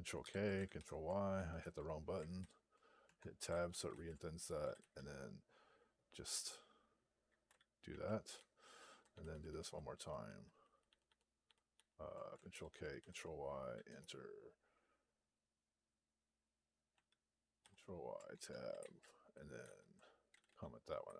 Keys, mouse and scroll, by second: 2.3 ctrl+y, 2.9 Tab, 3.6 ctrl+p, 3.8 ctrl+a, 4.5 ;, 4.7 ;, 7.8 ctrl+a, 8.2 ctrl+n, 8.7-21.1 ctrl+n, 12.4 ctrl+k, 17.5 ctrl+y, 18.2 Tab, 18.7 ctrl+a, 19.5 ctrl+p, 20.2 ;, 20.3 ;.